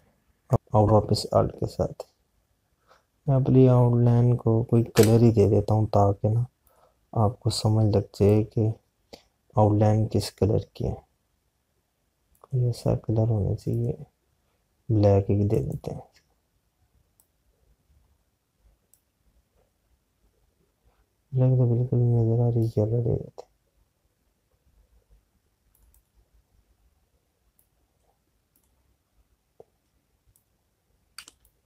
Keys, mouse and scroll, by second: 5.4 Escape, 7.1 click, 23.1 click, 26.2 click.